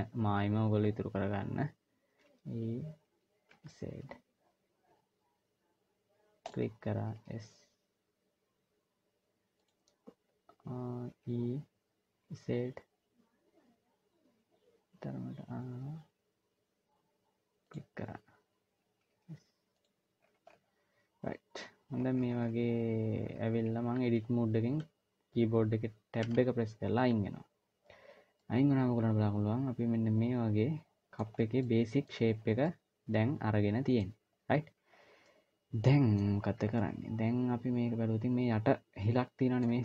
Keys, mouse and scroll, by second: 1.9 e, 7.0 s, 11.0 e, 18.8 s, 19.9-21.8 scroll down 5, 21.8 scroll down 1, 21.9 scroll down 1, 22.0 scroll up 1, 22.2-22.9 scroll down 1, 22.9 scroll down 1, 25.9 Tab, 28.1 middle click, 31.1-31.6 scroll down 3, 31.4 middle click, 32.1 scroll up 2, 32.3-32.7 scroll down 2, 32.4 middle click, 34.1-34.5 scroll up 1, 34.7-35.0 scroll down 1, 35.0 middle click, 36.1-36.5 scroll up 2, 36.5 middle click.